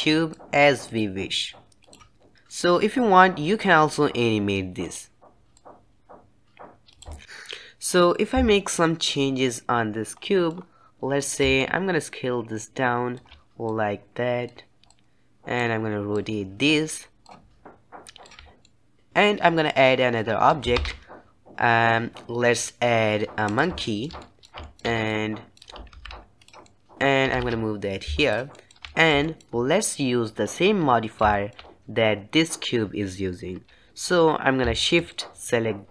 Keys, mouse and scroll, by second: 0.6 click, 1.7 click, 4.3 click, 5.8-7.2 drag, 12.5-17.6 shift+drag, 17.8-18.9 shift+drag, 18.9-19.4 middle drag, 19.4-19.9 scroll up 2, 19.9-23.8 shift+middle drag, 23.8 shift+a, 24.1-25.1 shift+middle drag, 25.1 scroll up 2, 25.3-26.0 middle drag, 26.0 g, 26.9 middle click, 27.3 g, 27.5 g, 28.7-35.3 shift+middle drag, 35.3 shift+click.